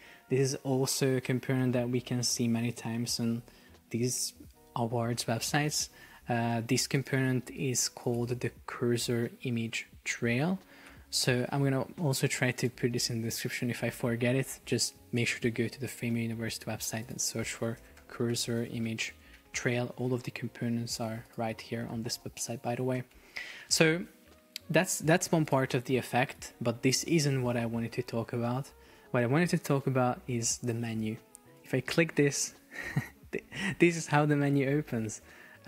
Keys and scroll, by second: 6.3 Escape, 10.9 shift+super+4, 12.3 Escape, 15.4 alt+f, 15.7 super+o.